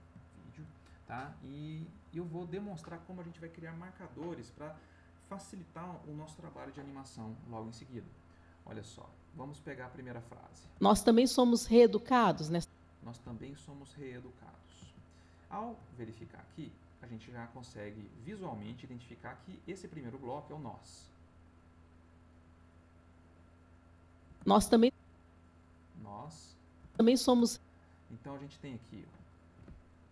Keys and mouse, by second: 0.3 ctrl+middle click, 8.4 click, 10.6 space, 12.3 space, 15.1 ctrl+middle click, 20.9 click, 21.7 click, 22.5 click, 23.0-24.1 drag, 24.2 space, 25.4-26.7 drag, 26.8 space, 28.6 middle click, 29.1 ctrl+middle click.